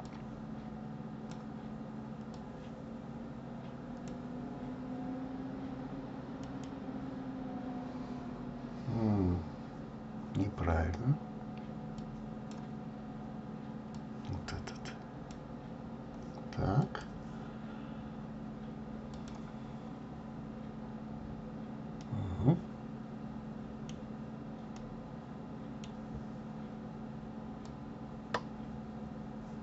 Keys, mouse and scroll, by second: 0.2 click, 2.3-2.7 drag, 12.7 click, 15.4 click, 19.6-21.9 scroll up 4, 22.5-28.1 middle drag, 24.2-25.1 scroll down 3, 28.1-29.6 drag.